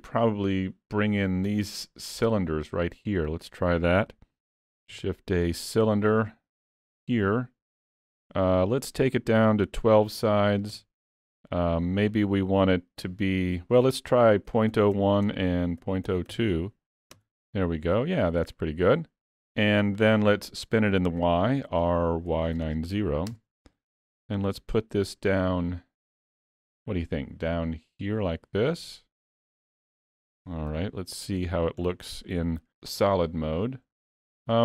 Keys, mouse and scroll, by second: 4.9 shift+a, 8.8 click, 12.1 click, 21.7 r, 24.2 g, 30.7 z, 31.9-32.2 scroll down 3, 32.2 middle click, 34.1 scroll up 2.